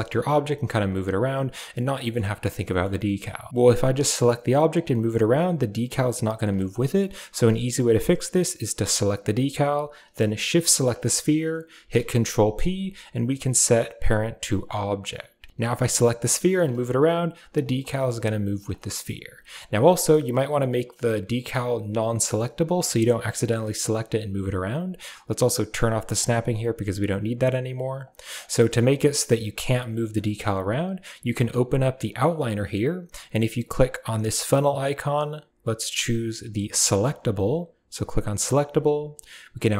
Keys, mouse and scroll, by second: 1.8 middle drag, 2.6 middle click, 8.7 right click, 10.6 shift+right drag, 11.6 ctrl+p, 15.5 r, 18.7 middle click, 19.3 shift+middle drag, 20.1 right click, 26.0 click, 27.8 click, 31.2 click, 33.6-37.8 drag, 39.5 click.